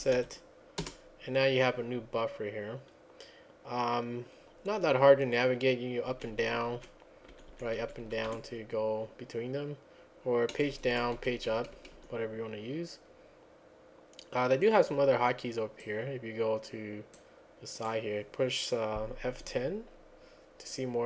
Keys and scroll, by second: 0.0-0.7 typing, 0.8 Return, 6.1 Down, 6.4 Down, 6.7 Down, 7.3 Up, 7.5 Up, 7.8 Down, 8.0 Down, 8.3 Up, 10.5 Page_Down, 10.7 Page_Down, 10.9 Page_Down, 11.2 Page_Up, 11.4 Page_Up, 11.6 Page_Up, 11.8 Page_Up, 12.0 Page_Up, 19.5 F10.